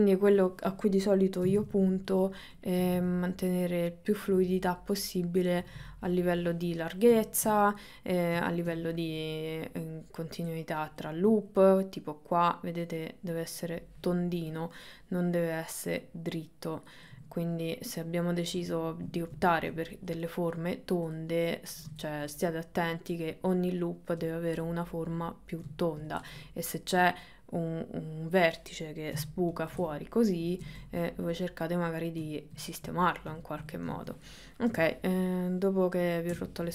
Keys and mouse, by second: 1.5 g, 2.7 click, 2.9 g, 4.2 click, 5.7 g, 6.4 middle click, 7.4 shift+middle click, 7.7 middle click, 8.7 ctrl+middle click, 9.7 middle click, 11.1 middle click, 14.6 click, 14.9 middle click, 16.1 click, 17.1 middle click, 18.5 middle click, 19.5 ctrl+middle click, 20.0 middle click, 21.2 middle click, 22.4 middle click, 24.7-25.7 middle drag, 25.9 ctrl+middle click, 26.3 middle click, 27.3-28.4 middle drag, 29.2 g, 29.9 middle click, 30.7 ctrl+z, 31.1 middle click, 31.9 middle click, 32.5 middle click, 32.8 middle click, 34.1 middle click, 34.7 KP_1, 36.4 KP_3.